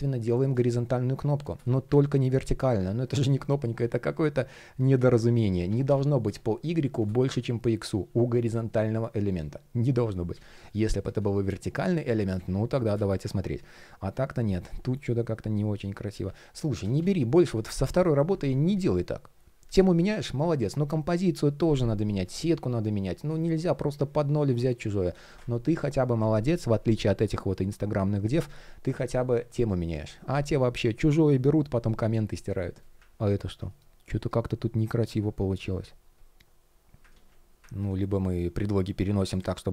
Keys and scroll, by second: 1.5 super+z, 5.1 super+z, 12.0 super+z, 14.1 alt+l, 14.4 alt+shift+p, 16.3 super+z, 23.2 shift+p, 24.9 super+z, 33.3 shift+p, 36.7 super+z.